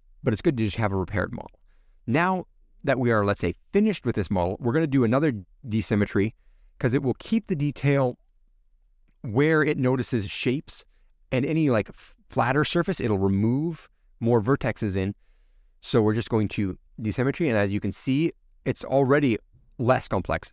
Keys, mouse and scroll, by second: 0.0 click, 6.6-10.5 drag, 10.5 ctrl+alt+F6, 16.3 click, 17.0-17.6 scroll up 5, 18.0 shift+middle click, 18.8-19.6 scroll down 5, 19.6-20.5 middle drag.